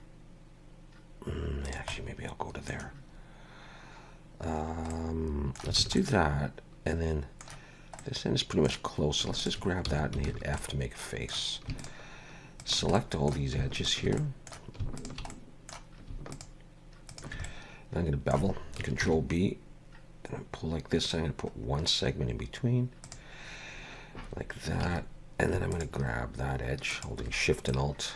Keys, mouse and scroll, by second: 1.9 middle click, 4.9 middle click, 5.8 alt+a, 6.0 middle click, 8.0 middle click, 9.4 alt+shift+click, 9.9 f, 10.3 alt+a, 10.6 middle click, 11.8 alt+shift+click, 13.0 middle click, 13.8 alt+shift+click, 14.2 middle click, 15.0 alt+shift+click, 15.3 middle click, 16.4 alt+shift+click, 17.5 middle click, 19.1 ctrl+b, 24.9 alt+a, 25.7 alt+shift+click, 27.7 middle click.